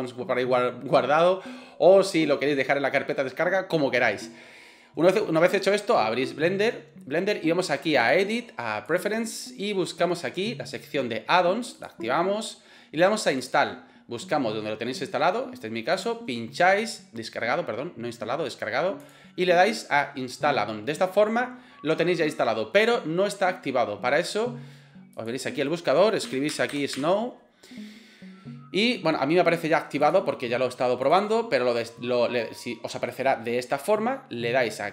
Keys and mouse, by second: 8.2-9.0 drag.